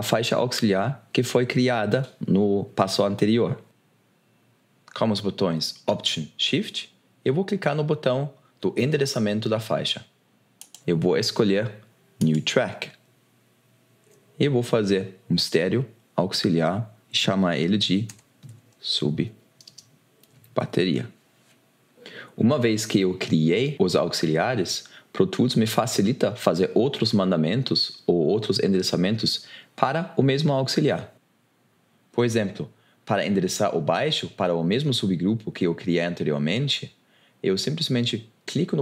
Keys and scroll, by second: 18.3-21.2 typing.